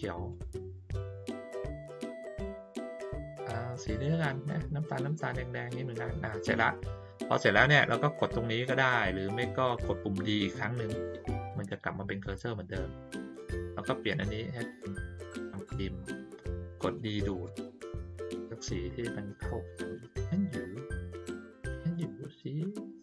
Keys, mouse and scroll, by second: 0.3 click, 1.1 click, 1.7 click, 2.3 click, 13.5 click, 18.2 click, 18.8 click, 19.3 click, 19.8 click, 20.5 click, 21.2 click, 21.9 click.